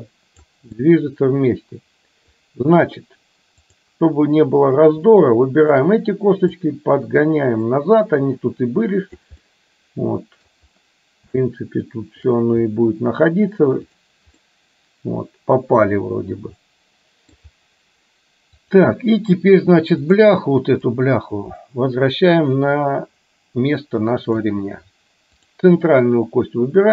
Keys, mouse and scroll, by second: 0.9-2.4 middle drag, 3.8 click, 5.3-6.0 shift+drag, 6.5-9.4 drag, 9.5-10.5 middle drag, 11.5-12.4 shift+middle drag, 12.4 scroll down 1, 14.4-17.4 middle drag, 21.1-24.5 drag, 25.5 click.